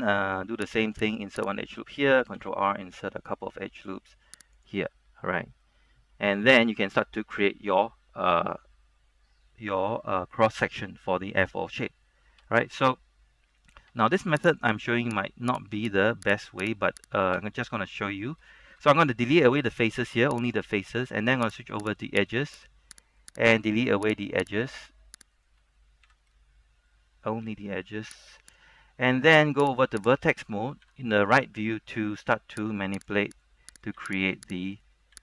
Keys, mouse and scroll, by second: 1.2 click, 1.6 right click, 2.5 ctrl+r, 3.6-4.1 scroll up 1, 4.1-4.7 scroll down 1, 4.7 click, 5.0 middle click, 6.8-9.6 scroll up 1, 9.6 middle click, 10.2-11.6 scroll up 1, 11.6-12.5 scroll down 1, 12.5-12.9 scroll up 1, 12.9-14.0 scroll down 1, 14.7 ctrl+Tab, 14.7 click, 15.3 middle click, 15.6 right click, 17.0 shift+right click, 17.9 middle click, 18.3 scroll up 1, 19.7 x, 20.5 click, 21.9 ctrl+Tab, 21.9 click, 22.1 right click, 22.8 shift+right click, 23.3 shift+right click, 23.6 shift+right click, 24.3 shift+right click, 26.2 shift+x, 28.6 click, 29.9 ctrl+Tab, 29.9 click, 30.3 right click, 30.9 KP_3, 31.4 shift+middle click, 32.8 g, 33.1 click, 33.4 right click, 34.1 g, 34.4 click, 34.9 right click.